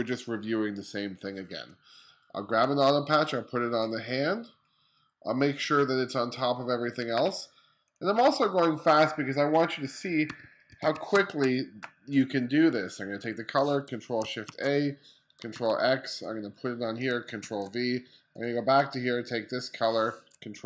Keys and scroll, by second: 9.9 2, 10.7 space, 14.0 shift+super+a, 15.1 super+x, 17.0 super+v.